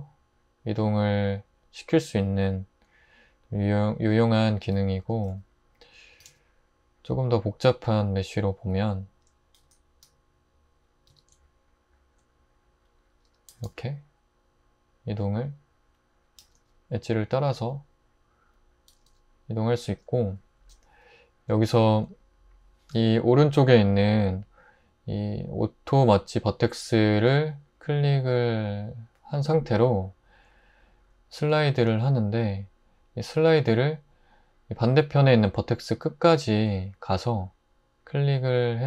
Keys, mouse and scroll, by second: 4.6 Tab, 5.3 x, 6.2 shift+a, 9.6 r, 10.0 r, 11.1 Tab, 13.5 typing, 16.4 typing, 18.9 typing, 31.9 typing.